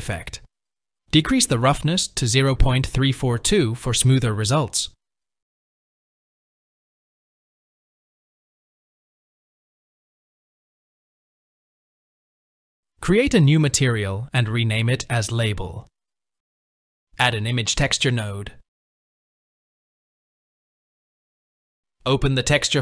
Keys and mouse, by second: 1.7 click, 3.1-4.7 drag, 14.0-15.8 drag, 19.1-22.8 drag.